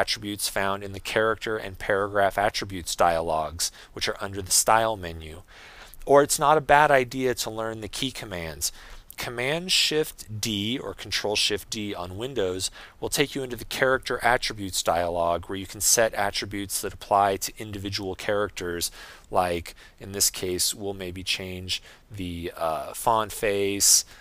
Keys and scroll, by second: 11.9 shift+super+d.